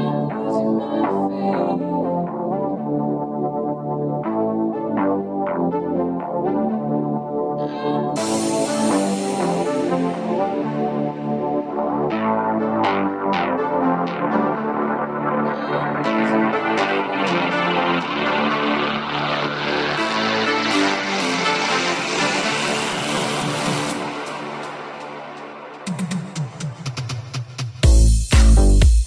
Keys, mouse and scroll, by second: 1.9 alt+s, 11.0 w, 12.4 g, 17.4-18.8 ctrl+z.